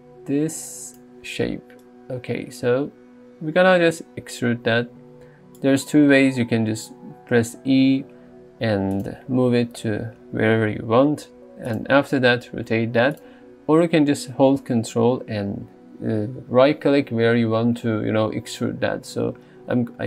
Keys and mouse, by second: 1.9 right click, 7.8 e, 9.0 click, 9.5 r, 11.7 click, 12.5 g, 13.2-15.6 drag.